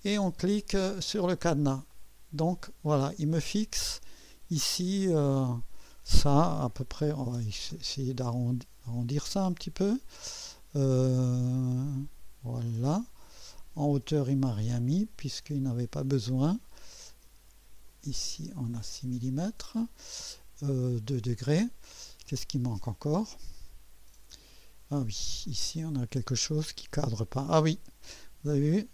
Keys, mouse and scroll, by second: 1.9 click, 4.9 click, 6.5-7.9 typing, 8.7 scroll up 1, 11.2 scroll down 1, 11.9-16.0 right drag, 14.8 typing, 16.3 scroll up 1, 17.9-19.4 drag, 23.5 click, 25.0-25.4 scroll up 2, 25.5-25.9 right drag, 26.3 right click, 26.9 scroll up 1, 28.7 right click.